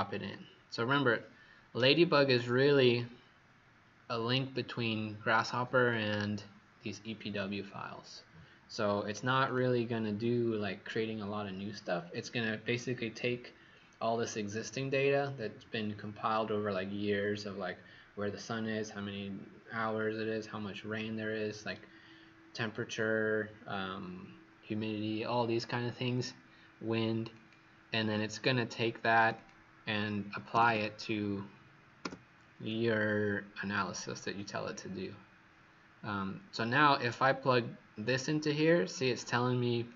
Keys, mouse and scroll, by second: 29.3 click, 30.5 typing, 32.0 Return, 32.6 click.